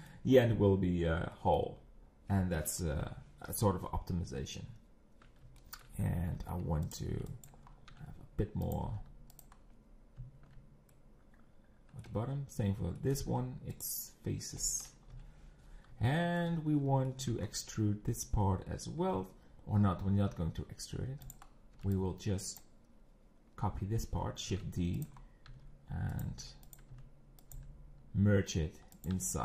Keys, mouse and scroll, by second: 0.7-1.0 scroll down 3, 1.3 middle click, 1.7-2.0 scroll down 3, 2.9 KP_3, 3.5 scroll down 7, 4.2 scroll down 4, 5.6 shift+middle click, 6.0 scroll up 2, 6.4 z, 6.9 click, 7.5 b, 7.6 scroll up 3, 7.9 e, 8.9 g, 9.5-9.9 scroll down 4, 10.5 z, 10.9-13.2 middle drag, 13.2 x, 15.1 KP_1, 15.7 scroll down 6, 16.1 shift+middle click, 16.5 scroll up 5, 17.1 shift+middle click, 17.4 scroll up 6, 18.7 scroll down 3, 20.3 z, 21.3 click, 21.4-21.7 scroll down 3, 22.6 b, 22.9-23.8 scroll up 1, 23.8-24.2 scroll up 2, 24.5-27.5 typing, 25.2 scroll up 1, 29.1 r.